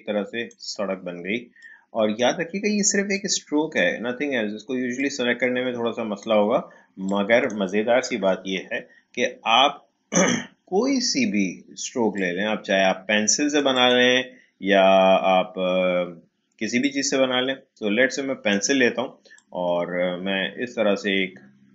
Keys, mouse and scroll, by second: 8.1 Delete, 12.1-15.9 drag, 16.8-21.7 drag.